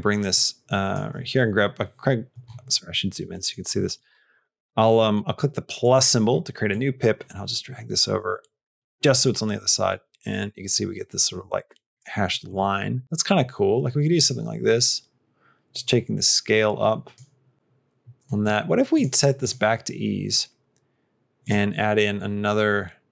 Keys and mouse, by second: 0.2 click, 2.8 middle click, 3.3 middle click, 3.7 middle click, 4.8 middle click, 5.7 click, 6.5-11.8 drag, 12.4 click, 13.0-17.0 drag, 18.1 middle click, 18.8 click, 21.3 click.